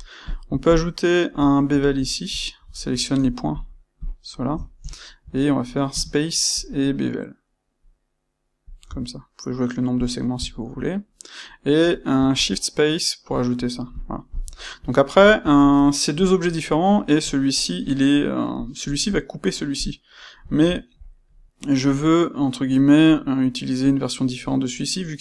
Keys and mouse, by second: 0.2 click, 0.7 shift+click, 2.0-3.5 middle drag, 3.5 shift+click, 3.9 shift+click, 4.3-12.3 shift+middle drag, 13.9 middle click, 13.9 click, 14.2 middle drag, 17.4 click, 19.0 click, 19.7 click, 20.4-25.2 ctrl+shift+middle drag.